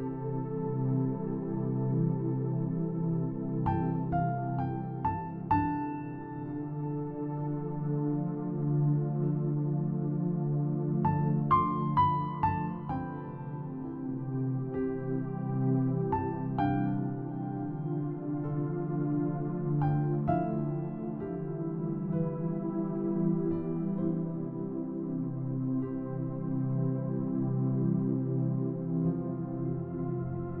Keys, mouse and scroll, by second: 0.0 click, 0.5-1.3 scroll down 2, 0.7 middle click, 2.2 e, 3.8 click, 4.1 s, 5.5 click, 6.0 middle click, 6.7-7.7 scroll down 2, 7.1 middle click, 7.9 click, 9.3 click, 11.2 click, 13.2 click, 14.5 click, 14.7 click, 15.4 middle click, 16.0-16.8 scroll down 5, 16.6 middle click, 16.9 middle click, 17.5 middle click, 19.3 middle click, 20.3 middle click, 20.9 middle click, 22.0 click, 23.9 click, 24.7 middle click, 25.1 scroll down 1, 27.6 click, 28.8 middle click, 29.8-30.6 scroll down 2.